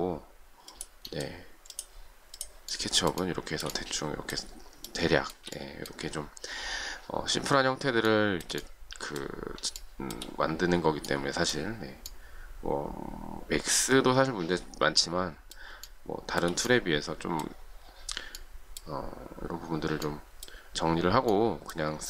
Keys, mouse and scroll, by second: 2.7 shift+middle click, 3.1 shift+middle click, 4.8 shift+middle click, 8.0 shift+middle click, 9.7 shift+middle click, 15.8 shift+middle click.